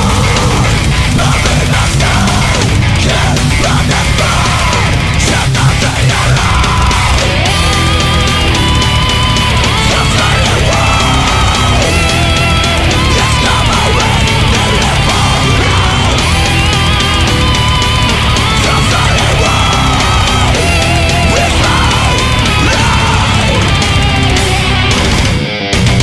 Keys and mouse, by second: 3.6 ctrl+z, 4.6 ctrl+z, 6.2 ctrl+z, 8.8 ctrl+z, 9.6 ctrl+z, 10.1 ctrl+z, 10.5 ctrl+z, 10.8 ctrl+z, 11.4 right click, 11.5 ctrl+z, 11.9 ctrl+z, 22.9 ctrl+z.